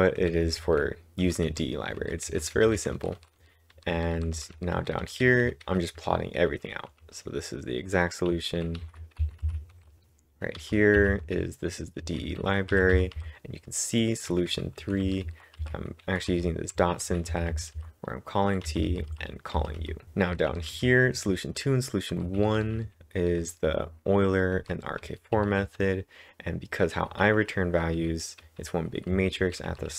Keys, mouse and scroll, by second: 0.0-7.7 typing, 9.5-12.8 typing, 14.1-14.8 typing, 17.1-18.9 typing, 20.0 typing, 21.8-25.1 typing, 28.0 typing.